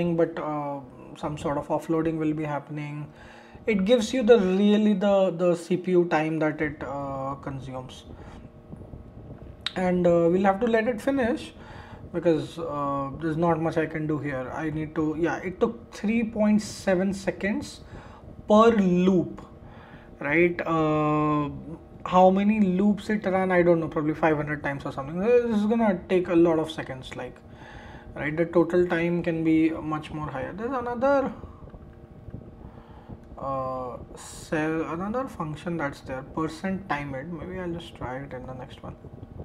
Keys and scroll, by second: 33.2 super+c, 37.6 super+a, 38.4 super+c.